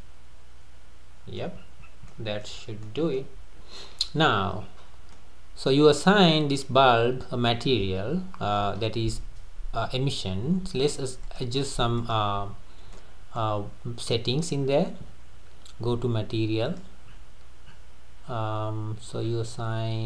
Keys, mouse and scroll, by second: 0.0-1.6 middle drag, 1.6-2.1 scroll up 4, 2.1-2.6 middle drag, 2.6-2.9 scroll down 3, 2.9-4.6 middle drag, 4.6-5.1 scroll up 2, 5.1-6.9 middle drag, 6.9 scroll down 3, 7.3-10.3 middle drag, 11.2 click, 12.0 click, 12.7 scroll down 1, 12.9-16.7 middle drag, 16.7 click, 17.1-17.7 scroll up 4, 17.7-18.3 scroll up 5, 18.3 scroll down 3, 19.3-19.7 scroll up 3.